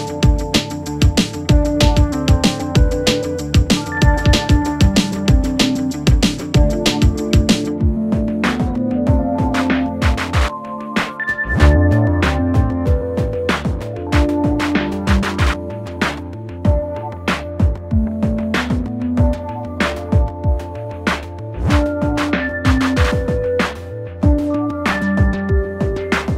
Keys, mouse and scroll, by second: 1.1 click, 3.3-6.1 drag, 6.7-7.4 typing, 13.5 8, 14.5 f, 15.9-17.8 drag, 24.0-24.5 typing, 25.8-26.3 typing.